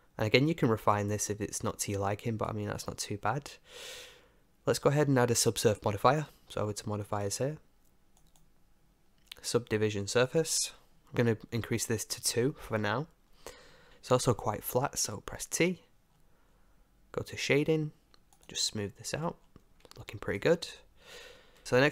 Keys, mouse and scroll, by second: 0.9 Tab, 1.3-4.4 middle drag, 3.0 Tab, 7.1-10.1 drag, 11.1-13.9 drag, 18.4-20.2 drag, 19.1 t, 20.2-21.6 middle drag.